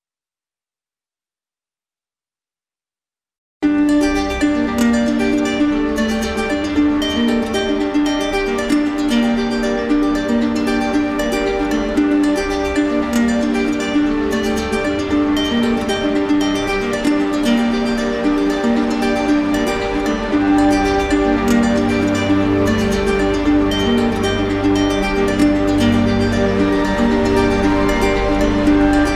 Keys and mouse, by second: 0.3 click, 1.0 click, 1.5 click, 2.1 click, 2.7 click, 3.5 click, 4.1 click, 4.7 click, 5.2 click, 5.7 click, 8.1 shift+click, 10.5 shift+click, 11.0 shift+click, 11.2 shift+click.